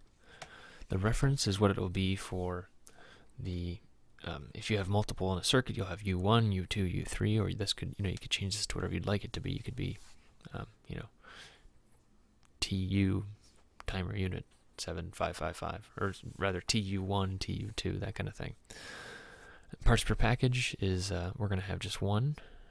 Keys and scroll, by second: 0.5 Tab.